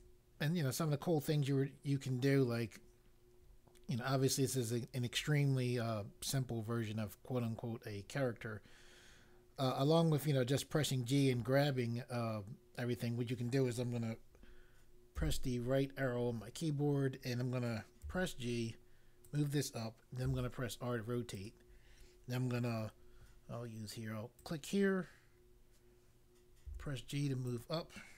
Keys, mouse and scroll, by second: 15.2 Right, 18.0 g, 19.2 click, 20.2 r, 21.3 click, 24.3 click, 26.6 g, 27.4 click.